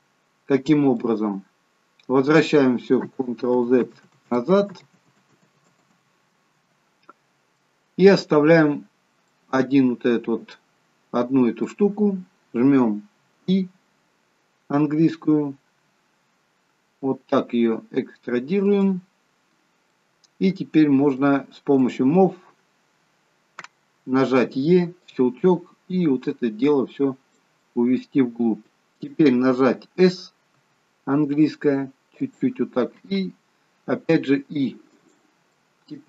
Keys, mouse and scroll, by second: 0.0-2.4 scroll down 13, 1.0 middle click, 3.5 ctrl+z, 4.0 ctrl+z, 4.8 ctrl+z, 5.3 ctrl+z, 7.6 middle click, 8.7-9.3 scroll up 1, 9.3 middle click, 9.3-10.6 scroll up 2, 19.5-19.9 scroll up 2, 19.9 middle click, 21.9 click, 24.9 e, 26.3 click, 27.6 middle click, 30.5 s, 35.5 middle click.